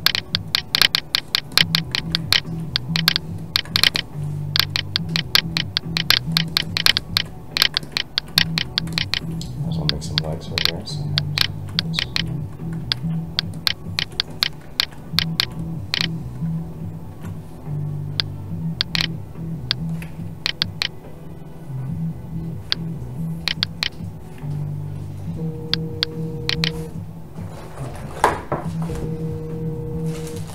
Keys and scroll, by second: 20.0 Escape, 22.7 Escape, 24.4 Escape.